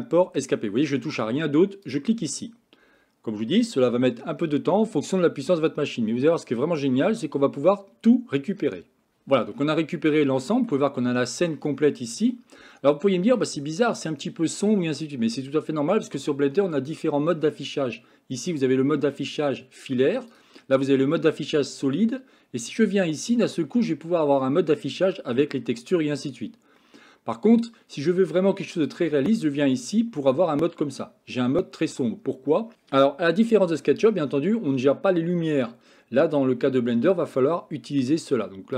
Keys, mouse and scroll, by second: 9.7 middle click, 11.1 middle click, 12.6 middle click, 14.7-16.2 middle drag, 18.4 click, 20.2 click, 21.1 middle click, 23.5 click, 25.2-26.2 middle drag, 26.8 middle click.